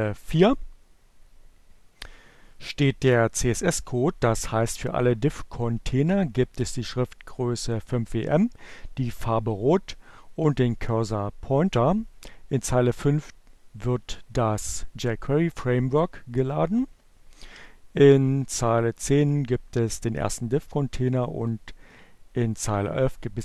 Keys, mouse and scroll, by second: 18.2 click, 21.0 click.